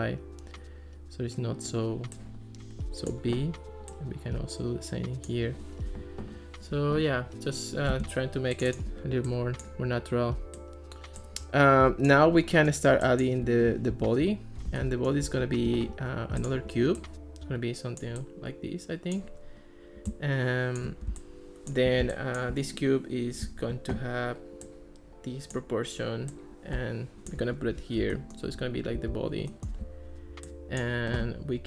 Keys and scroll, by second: 7.9 Escape, 13.9 alt+r, 27.6 alt+r.